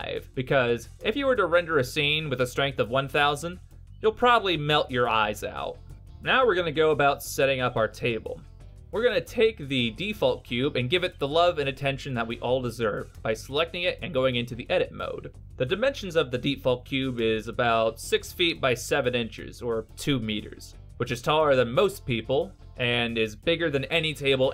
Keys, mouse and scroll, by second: 7.8 middle click, 8.2-11.0 scroll up 5, 12.0 right click, 12.8 middle click, 13.5 Tab, 14.3 middle click, 16.9 n, 18.7 middle click, 22.0 middle click, 23.3 shift+middle click, 24.0 middle click.